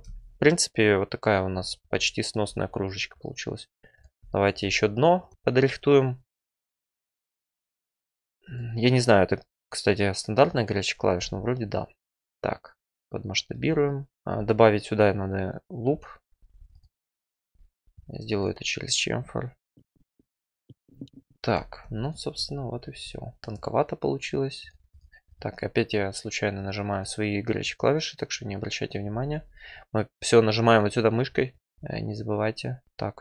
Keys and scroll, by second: 6.7 F4, 7.5 alt+e, 11.1 r, 16.3 2, 22.3 F4, 23.4 Tab, 29.1 F4, 32.8 2.